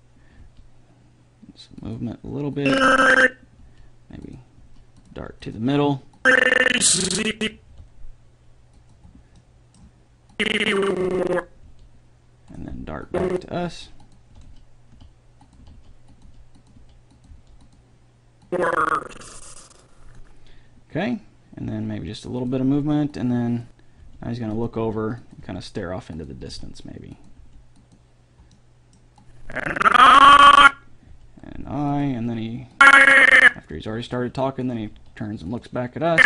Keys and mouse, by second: 0.6 g, 2.8-4.7 drag, 3.8 g, 4.8 r, 5.4 g, 7.9 g, 10.6-12.3 drag, 11.8 g, 13.3-15.1 right drag, 13.8 g, 14.5 r, 15.8 r, 16.4 g, 17.0 r, 17.5 g, 18.6-19.6 drag, 21.9 g, 23.4-25.2 drag, 24.2 g, 25.0 r, 25.6 g, 26.6 r, 27.6 g, 29.4-30.8 drag, 31.3 g, 34.0 g, 35.0 r.